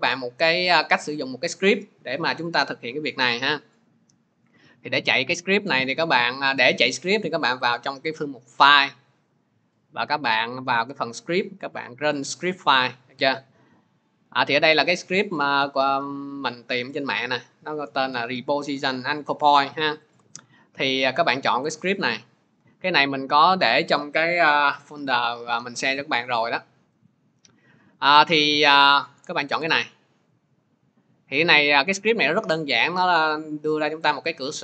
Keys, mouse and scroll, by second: 0.0 ctrl+z, 0.0 click, 5.1 click, 7.7 click, 12.1 click, 15.2-17.2 drag, 20.0 click, 20.5 click, 26.9 click, 27.9 click, 29.4 click, 29.6 click, 32.1 click, 33.9 click.